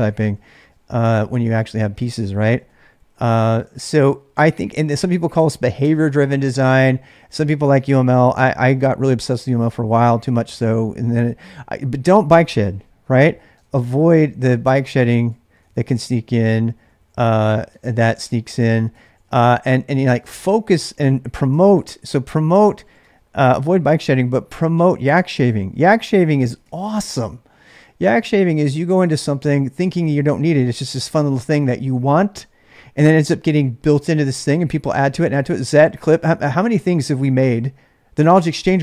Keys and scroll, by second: 0.0-6.3 typing, 13.6-23.3 typing, 25.5-29.3 typing.